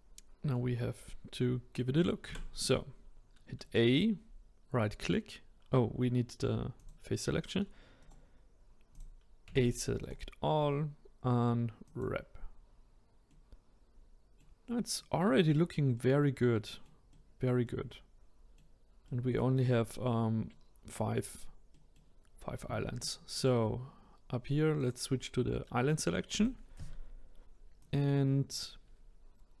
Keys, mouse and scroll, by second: 3.6-6.6 right drag, 6.8-8.0 drag, 8.0 right click, 8.9 click, 9.5 a, 10.0-13.0 right drag, 13.3-15.4 middle drag, 15.4 scroll up 2, 15.9-23.3 middle drag, 23.3 click, 24.8 click, 26.3 click, 27.8-29.6 drag.